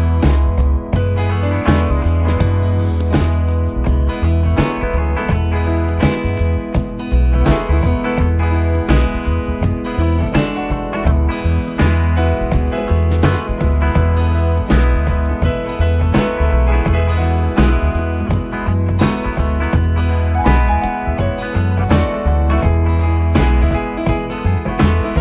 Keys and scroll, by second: 5.0 Up, 5.9 Down, 7.9 Up, 9.0 Up, 9.2 Down, 9.6 Up, 11.1 Down, 11.9 Up, 13.7 Down, 17.8 Up, 20.0 Left.